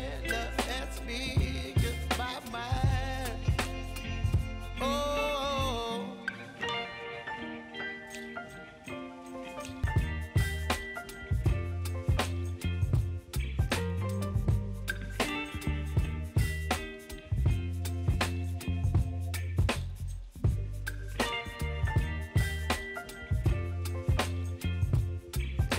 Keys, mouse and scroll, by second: 1.3-2.7 drag, 2.7 space, 4.1 click, 4.9 space, 6.2 click, 7.0 space, 8.7 click, 9.5 ctrl+c, 9.8 ctrl+v, 11.2 click, 11.6 F9, 12.6 alt+click, 13.2-14.4 typing, 14.6 Down, 15.2 Return, 16.4 typing, 17.0 Return, 18.3-24.2 drag, 24.6 ctrl+c, 25.0 space.